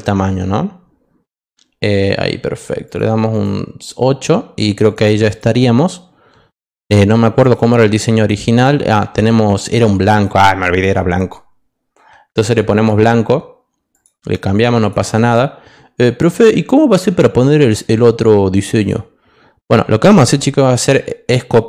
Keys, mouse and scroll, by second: 2.8 click, 3.3 click, 7.4 click, 12.7 click, 13.9 click, 14.8 click, 18.7 click.